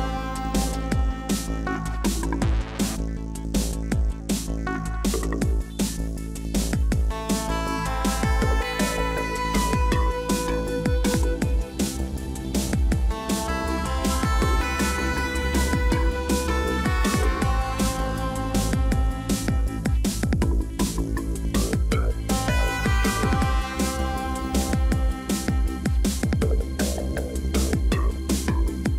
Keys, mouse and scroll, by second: 17.2 right click.